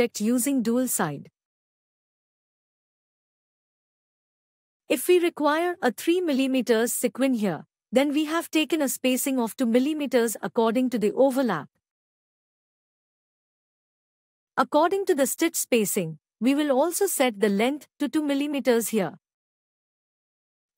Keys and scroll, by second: 16.6 ctrl+Tab.